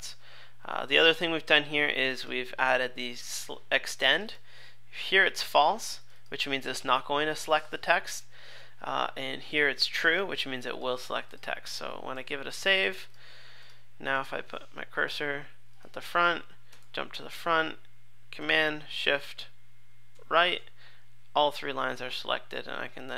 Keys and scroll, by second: 12.1 super+s, 16.8 super+Left, 20.1 shift+super+Right.